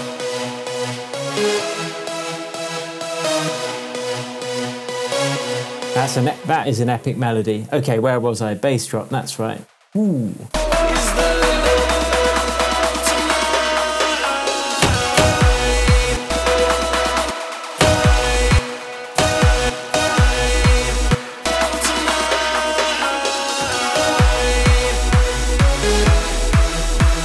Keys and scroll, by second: 6.2 space, 7.1 super+s, 16.0 space, 21.0 space.